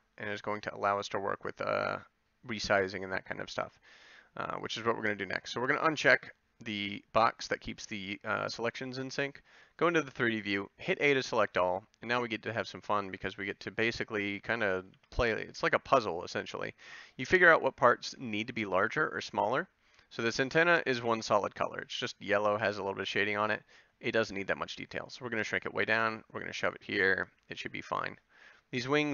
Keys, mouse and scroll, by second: 10.6 a, 13.1 b, 14.9 c, 23.4 s, 25.4 g, 27.2 a, 27.8-28.9 middle drag.